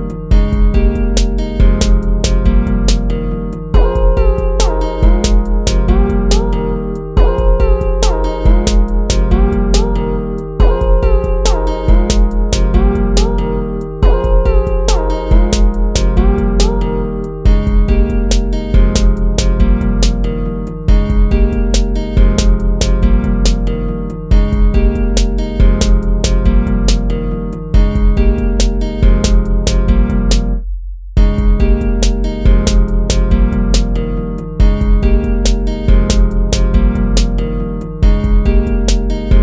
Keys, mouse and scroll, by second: 0.5 ctrl+-, 7.1 ctrl+-, 7.7 ctrl+-, 8.0 ctrl++, 8.9 ctrl++, 10.3 ctrl+-, 12.5 ctrl+z, 16.4 ctrl+-, 17.2 ctrl+-, 17.9 ctrl++, 21.0 ctrl++, 22.7 ctrl+-, 23.1 ctrl+-, 25.7 ctrl++, 29.7 ctrl+-, 30.1 ctrl++, 30.7 ctrl+-.